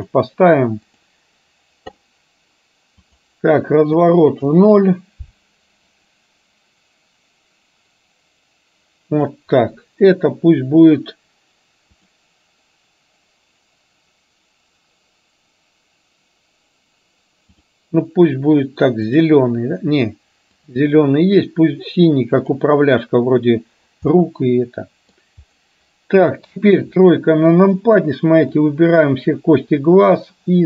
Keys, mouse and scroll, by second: 1.0-1.3 drag, 3.2-4.8 drag, 6.1-11.9 drag, 12.0 click, 24.2-25.2 middle drag, 26.6 KP_3, 28.7-29.2 drag, 30.2-30.6 drag.